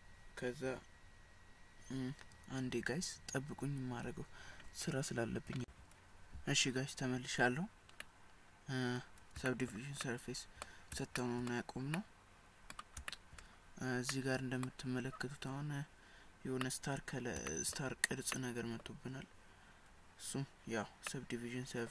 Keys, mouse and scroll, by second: 8.2 middle click, 9.5 shift+middle click, 10.1 middle click, 11.2 shift+middle click, 12.0 middle click, 13.1 shift+middle click, 14.1 middle click, 15.5 scroll up 2, 16.6 scroll up 1, 16.7 middle click, 17.5 shift+middle click, 18.0 scroll down 2, 18.4 middle click, 21.1 middle click.